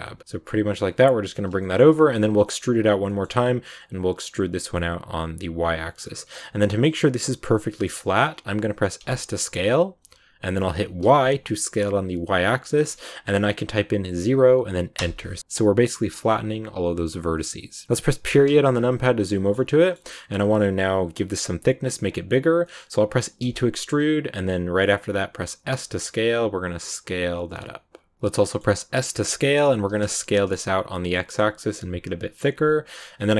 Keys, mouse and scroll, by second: 1.5 shift+middle click, 2.1 e, 5.8 scroll up 5, 7.6-8.9 shift+middle drag, 8.9 s, 15.4-17.1 shift+middle drag, 17.1 click, 18.2 KP_Decimal, 18.6 scroll down 2, 18.9 middle click, 19.4 scroll up 1, 19.6-22.5 scroll down 3, 19.7 middle click, 22.5 scroll up 1, 22.5 middle click, 23.3 e, 28.1 middle click, 28.9 s, 33.2 middle click.